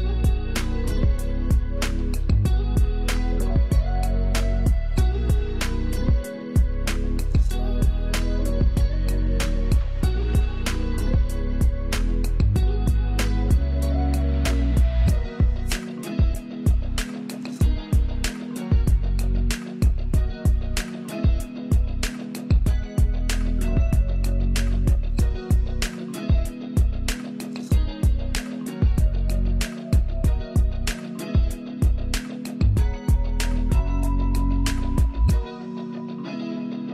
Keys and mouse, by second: 0.8 ctrl+f, 2.6-10.0 drag, 13.2 =, 16.4 click, 26.1 =, 31.4-36.9 drag.